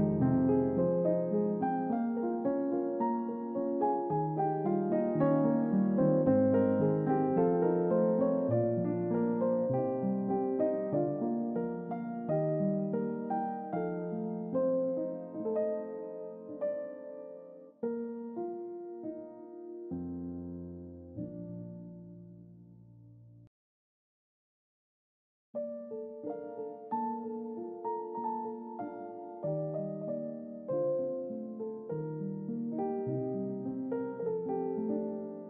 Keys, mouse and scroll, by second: 1.8-3.2 drag, 4.3 click, 5.3 scroll down 2, 6.2 click, 10.2 click, 12.2 drag, 13.9 click, 20.8 click, 22.0-30.8 drag, 31.5 click, 32.5 click, 33.6 click, 35.2-35.4 drag.